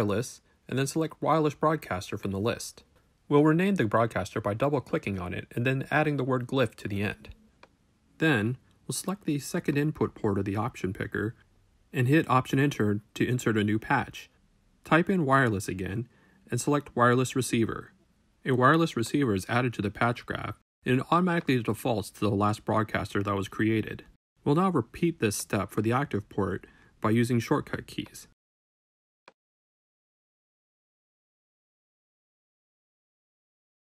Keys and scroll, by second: 0.9 Return, 1.9 shift+Return, 2.2 shift+Return, 2.6 shift+Right, 3.2-5.0 typing, 12.6 alt+Return, 13.7-14.7 typing, 16.5 Return, 26.6 w, 29.9 shift+Return, 30.7 shift+Right, 31.2-33.4 typing.